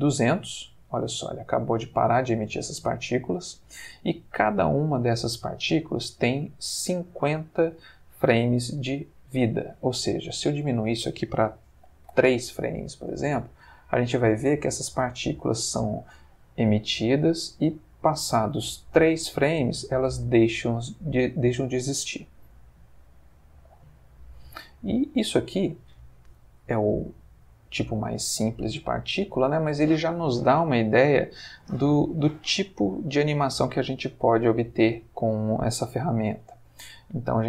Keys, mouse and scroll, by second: 9.6 Escape, 10.6 click, 11.8 3, 12.0 Return, 13.1 space, 20.6-21.8 drag, 23.3 click, 36.3 Escape.